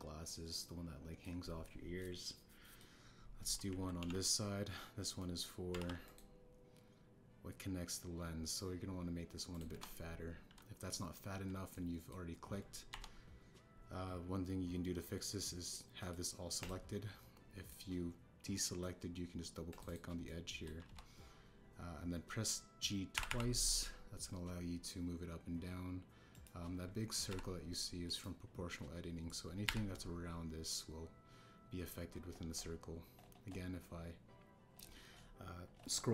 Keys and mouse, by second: 0.2-2.2 middle drag, 2.9 middle click, 4.9 ctrl+e, 6.1 middle click, 6.7 ctrl+r, 10.7 KP_1, 12.7 click, 13.8 KP_1, 17.0 click, 17.6 click, 18.6-19.8 drag, 20.7 click, 20.8 click, 21.2 click, 21.8 KP_1, 24.1 g, 24.2 g, 27.3 click, 28.2 g, 29.0-30.6 drag, 30.6 g.